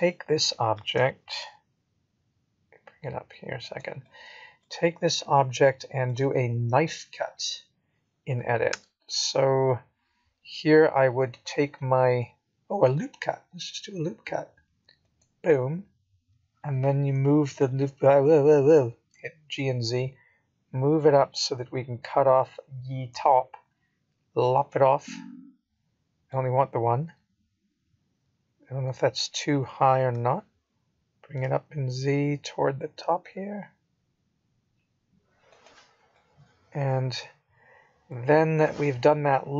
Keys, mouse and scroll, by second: 7.7 g, 10.5 middle click, 12.0 middle click, 16.9 KP_1, 17.7 click, 18.2-19.5 scroll up 2, 19.5 click, 19.5 scroll up 1, 19.7 g, 22.7 scroll up 1, 22.8 middle click, 23.6-24.2 scroll down 2, 24.0 middle click, 25.0-25.4 scroll down 3, 27.4 Tab, 31.5 click, 33.7 click, 35.8 g.